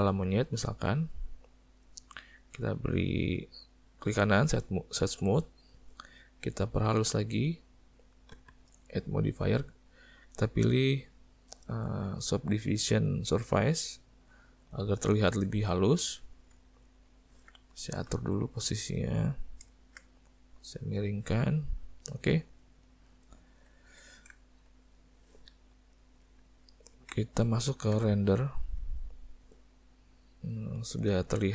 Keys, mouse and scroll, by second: 1.0 click, 3.1 right click, 7.0 click, 8.8 click, 14.8 middle click, 15.5 `, 16.6 ctrl+middle click, 16.9 middle click, 17.2 ctrl+middle click, 18.0 r, 21.0 click, 22.3 middle click, 22.7 ctrl+middle click, 22.9 ctrl+middle click, 23.2 ctrl+middle click, 23.4 middle click, 23.9 alt+a, 24.4 shift+middle click, 26.6 ctrl+middle click, 27.9 z, 30.0 middle click.